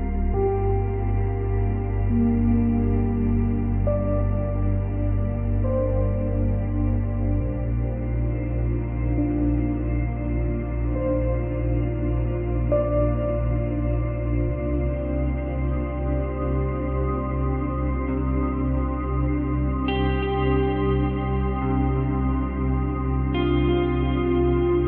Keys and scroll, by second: 2.2 space.